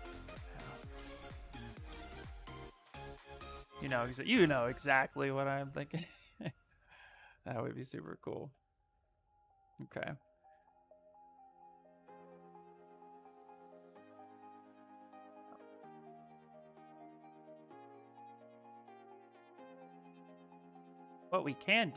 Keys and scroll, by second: 3.1 shift+f, 3.4 shift+f, 8.6 shift+f.